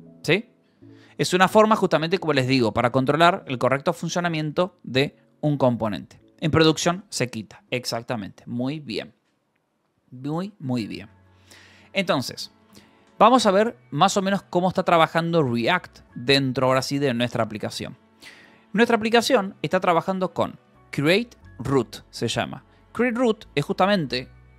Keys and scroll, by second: 0.4 d, 1.4 Escape, 2.2 k, 3.1 k, 10.7-13.1 typing, 12.8 Escape, 14.2 v, 14.7 Escape, 19.8 b, 20.9 Escape, 21.9 shift+k.